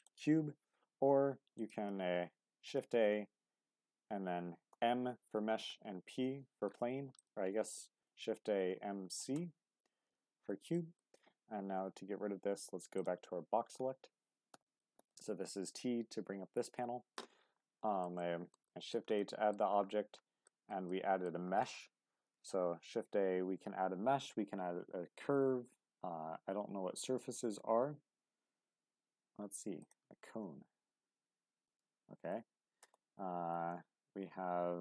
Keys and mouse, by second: 1.4 x, 2.7 shift+a, 8.0 shift+a, 10.7 click, 11.8 t, 15.0 t, 16.3 t, 16.7 t, 17.8 shift+middle drag, 18.2-18.5 middle drag, 18.7 shift+middle drag, 19.2-19.5 middle drag, 20.4 shift+middle drag, 20.9-21.3 middle drag, 22.3 shift+a, 31.6 click, 32.8 ctrl+z, 33.5 shift+a.